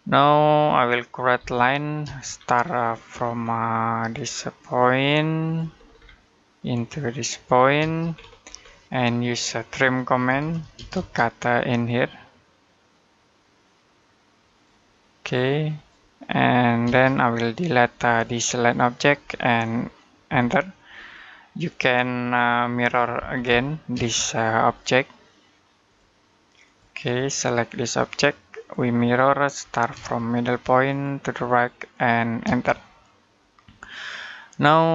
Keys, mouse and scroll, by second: 1.2 l, 1.9 space, 2.1-2.4 scroll down 1, 2.4 middle click, 5.3 click, 5.6-6.1 scroll down 1, 6.1 middle click, 7.4 click, 7.6 space, 7.9-8.5 scroll up 1, 8.5 middle click, 8.8-9.6 scroll up 1, 10.1-10.6 typing, 14.3 click, 16.7 space, 17.1 scroll down 1, 17.4 middle click, 17.9 click, 20.1 Delete, 20.8-21.1 scroll down 1, 21.1 middle click, 23.0-23.8 typing, 24.5 click, 28.8-29.1 scroll down 1, 29.1 middle click, 29.4-29.8 scroll down 1, 29.8 space, 30.7 click, 32.3 space, 33.2 middle click, 34.8-34.9 scroll down 1.